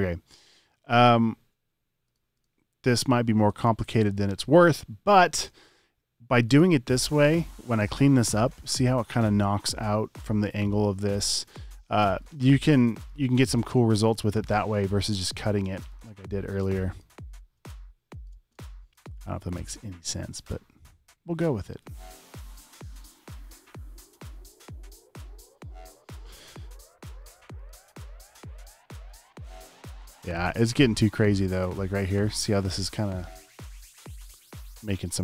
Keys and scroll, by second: 3.5 space, 4.3 space, 4.7 space, 5.5 space, 6.0 super+space, 11.3 space, 12.7 space, 13.2 alt+super+space, 14.7-17.6 typing, 19.0 space, 22.7-23.5 typing, 33.3 space, 33.9 super+space.